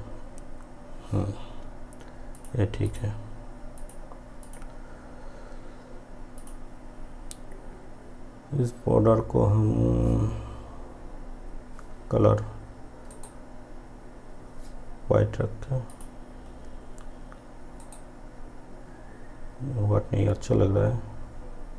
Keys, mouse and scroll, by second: 2.4 click, 13.2 right click, 16.0 click, 17.9 right click.